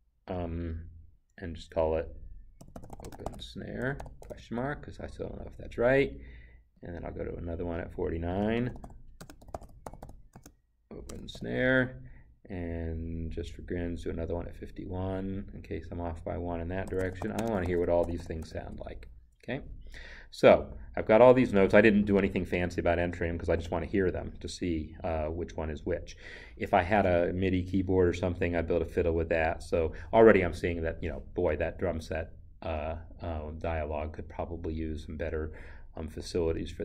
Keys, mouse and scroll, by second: 2.6-4.3 typing, 6.8 click, 8.4-11.3 typing, 15.2 click, 16.9-18.5 typing.